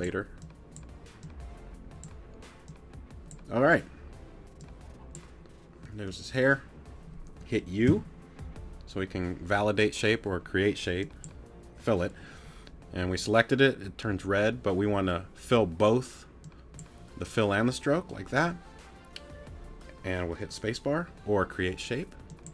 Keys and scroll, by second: 7.9 u.